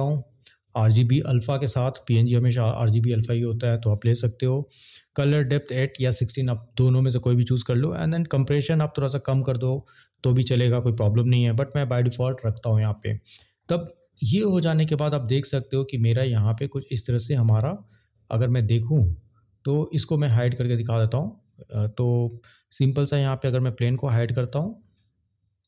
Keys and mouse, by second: 20.4 click.